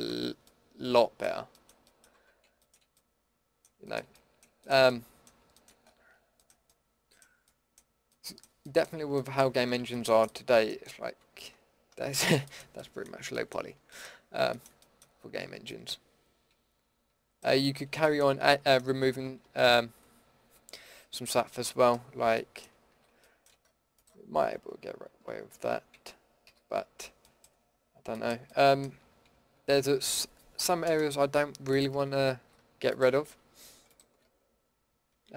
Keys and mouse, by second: 0.1 Tab, 2.1 Tab, 11.2 Tab, 15.4 Tab, 21.3-22.9 middle drag, 22.9 a, 25.1 ctrl+x, 25.9 ctrl+z, 26.4 a, 32.3 a.